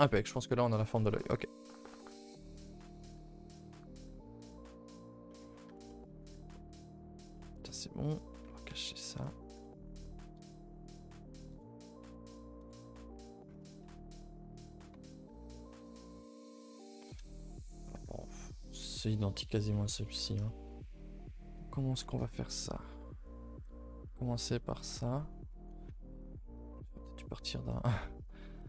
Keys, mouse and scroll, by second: 1.2-1.7 middle drag, 1.7-2.6 scroll up 6, 2.1 shift+middle drag, 2.6 g, 5.3 middle drag, 5.5 scroll up 5, 5.7 Tab, 5.9-6.5 middle drag, 6.5 middle click, 6.7 a, 6.8 a, 7.2 Tab, 7.3-7.6 middle drag, 9.1 click, 9.6 KP_0, 11.5 KP_0, 12.6 KP_0, 21.2 click.